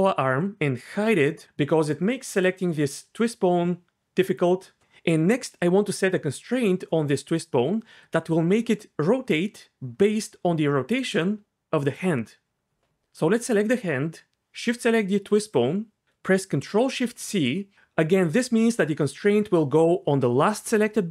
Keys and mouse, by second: 1.1 h, 1.4 ctrl+z, 1.4 g, 3.0 g, 11.8 click, 17.0 ctrl+shift+c.